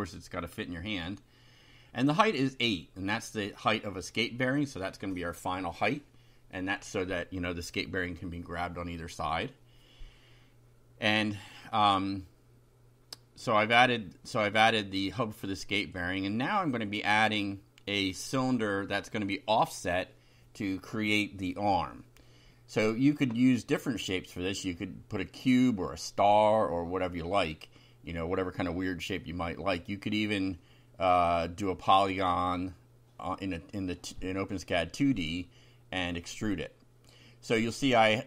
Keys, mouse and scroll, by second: 0.0 8, 1.1 F5, 3.0 ctrl+r, 3.7 click, 4.7 Return, 5.1 Up, 6.3 Up, 6.7 shift+End, 7.3 ctrl+c, 7.6 ctrl+Down, 8.2 ctrl+v, 9.8 Left, 13.1 Left, 14.5 Left, 14.7 Delete, 15.4 Right, 18.0 Left, 19.7 Home, 20.6-25.5 typing, 24.7 shift+Left, 27.0-33.6 typing, 34.7-36.8 typing, 36.3 Right.